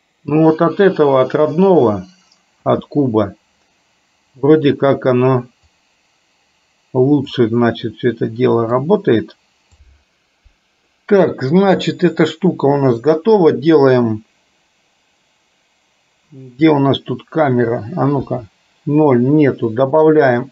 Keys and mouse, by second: 2.8 space, 5.9-7.4 drag, 7.8-8.9 middle drag, 11.0 middle click, 18.3 KP_0, 20.2-20.5 drag.